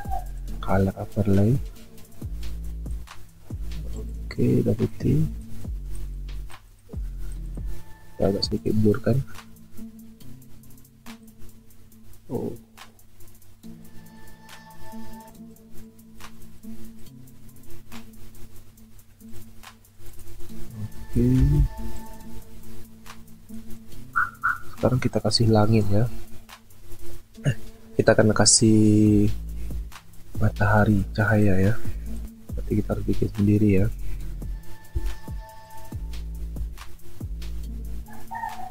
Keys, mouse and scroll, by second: 21.6 ctrl+z, 32.2 Delete, 34.9 b, 36.6 ctrl+z.